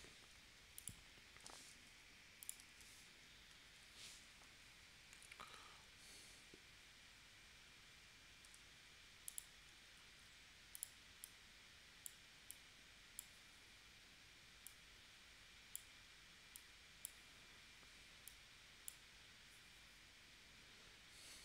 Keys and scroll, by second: 1.7 super+y, 2.7 super+y, 3.8 shift+w, 8.5 a.